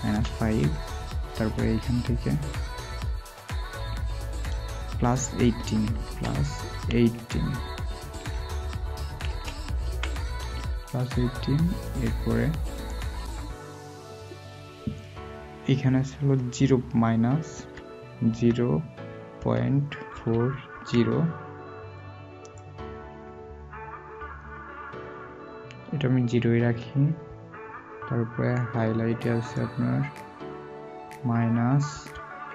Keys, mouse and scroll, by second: 20.1-20.7 typing, 31.9 typing.